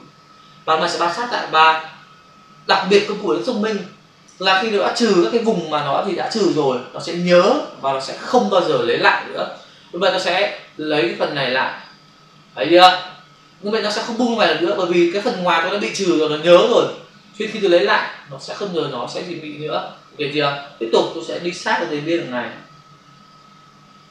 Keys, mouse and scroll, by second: 10.5 click, 12.6 click, 21.3 click.